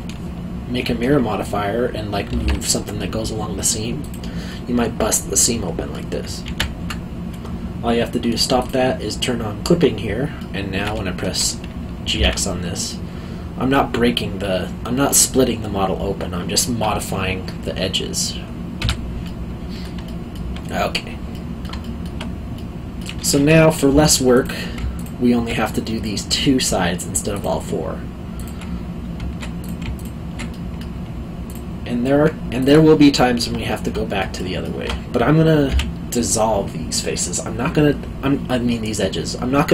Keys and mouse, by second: 2.3 g, 2.4 x, 4.0 click, 4.5 middle click, 6.4 ctrl+z, 8.6 click, 10.4 middle click, 12.0 g, 12.1 x, 18.8 Escape, 19.2 middle click, 20.0 alt+middle click, 21.8 alt+middle click, 23.9 2, 24.3 click, 24.9 shift+click, 25.6 middle click, 27.3 shift+click, 29.6 click, 29.9 shift+click, 30.5 middle click, 31.5 shift+click, 33.2 alt+middle click, 35.6 x.